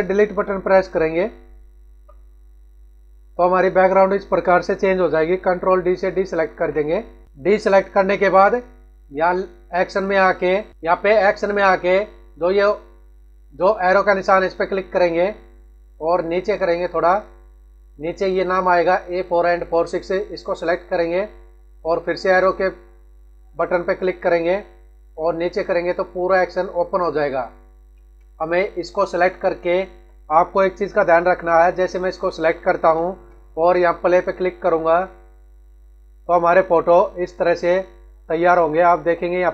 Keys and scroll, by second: 1.9 Delete, 6.5 ctrl+d.